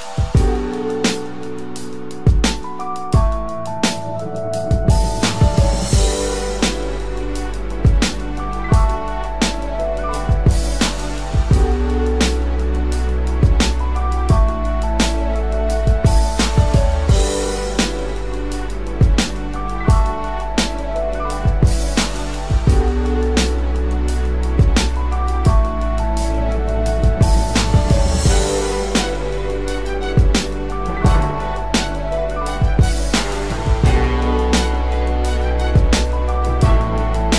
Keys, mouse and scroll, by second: 0.2 double click, 6.6 double click, 9.0 double click, 9.8 typing, 9.9 double click, 11.1-12.1 typing, 12.4 double click, 14.7 click, 29.7-32.4 typing.